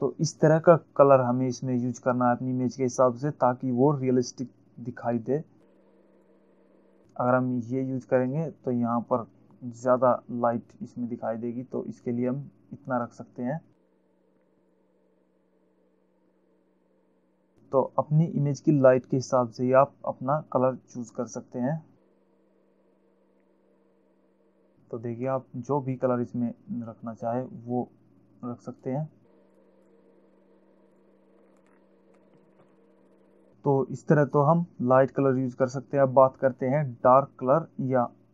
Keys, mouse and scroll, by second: 6.5 click, 11.7 click, 14.9 click, 29.1 click, 29.7 click, 31.2 click, 31.9-32.5 alt+scroll down 2, 32.9 ctrl+0.